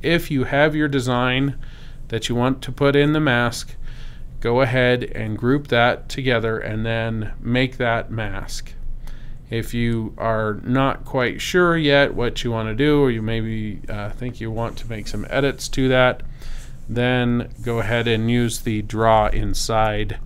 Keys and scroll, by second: 17.3 v.